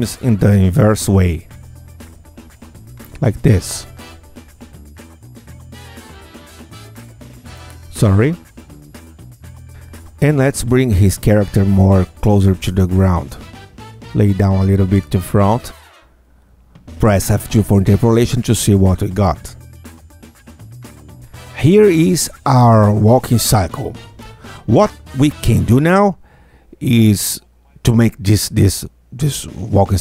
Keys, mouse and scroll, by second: 2.5-3.8 alt+drag, 4.3 alt+click, 5.3 alt+click, 6.3 alt+click, 7.3 alt+click, 8.3 alt+click, 9.3-9.6 alt+scroll up 2, 9.7 middle click, 9.7 q, 10.4-12.2 drag, 13.2-15.2 drag, 15.3 r, 18.1 click, 18.8 F2, 19.1-19.5 scroll down 2, 19.5 Tab, 20.7-30.0 drag.